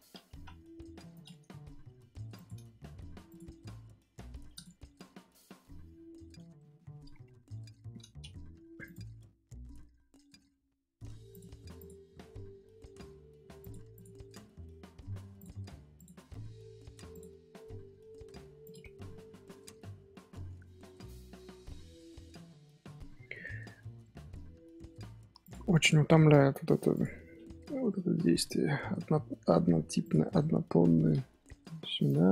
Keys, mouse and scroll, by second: 0.3 ctrl+z, 0.7 g, 3.2 click, 4.9-6.2 middle drag, 6.2 Tab, 6.5-7.1 shift+middle drag, 7.1 scroll down 1, 7.4 KP_7, 8.0 scroll up 1, 8.3-8.8 shift+middle drag, 8.8 click, 11.7 click, 13.9 click, 15.9 click, 17.1 click, 17.7 g, 19.0-20.8 middle drag, 20.8 Tab, 22.5 Tab, 22.9-23.6 middle drag, 23.6 scroll up 2, 23.7 scroll down 1, 24.0-24.5 middle drag, 24.5 scroll up 1, 24.7-25.4 middle drag, 25.4 click, 25.8 click, 26.6 h, 26.9 click, 27.0-28.4 middle drag, 28.4 Tab, 28.6-29.0 scroll up 3, 29.0 scroll down 1, 30.0 click, 30.3-30.7 shift+middle drag, 30.7 scroll up 2, 31.7 g.